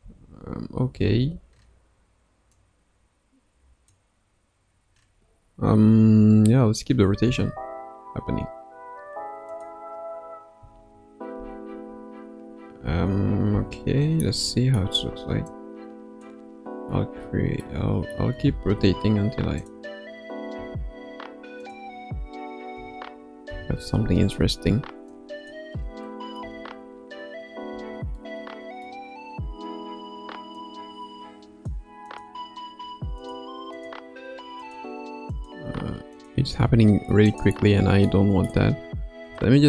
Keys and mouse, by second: 0.1 space, 0.9 space, 2.5-3.9 drag, 7.2 r, 10.5 a, 11.8 a, 12.8 a, 13.5 i, 14.4 middle click, 15.5 click, 17.6-18.1 middle drag, 18.3 r, 20.5 s, 22.7 a, 23.4 i, 25.1-25.5 drag, 26.1 middle click, 26.4 space, 27.7 space, 28.1-28.9 middle drag, 30.5-31.7 drag, 32.1 click, 32.7 g, 33.7 click, 35.3 click, 35.7 g, 37.3-38.1 drag, 38.1-38.5 middle drag, 39.2 KP_0.